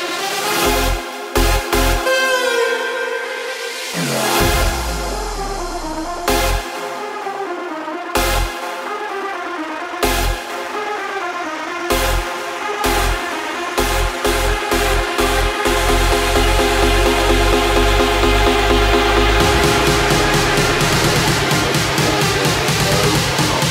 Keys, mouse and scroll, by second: 0.3 r, 2.0 g, 5.9 KP_0, 9.1 x, 9.9 click, 10.5 KP_7, 10.9-11.7 scroll down 3, 11.7 shift+d, 12.6 r, 13.9 g, 16.1 KP_0, 18.3 KP_7, 19.6 r, 20.8 KP_0, 22.6 click.